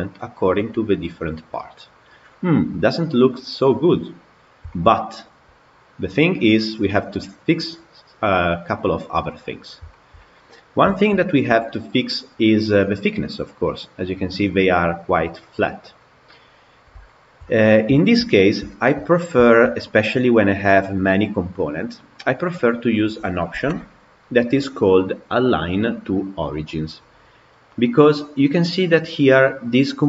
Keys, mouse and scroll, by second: 0.8-7.8 middle drag, 9.4-9.8 scroll up 2, 9.8-10.5 shift+middle drag, 10.5 scroll down 2, 10.8-15.7 shift+middle drag, 15.7 scroll down 1, 15.8-17.6 middle drag, 17.6 scroll down 2, 17.8-19.6 shift+middle drag, 19.6-20.8 scroll up 3, 20.8-22.6 scroll up 1, 23.8-24.4 scroll up 2.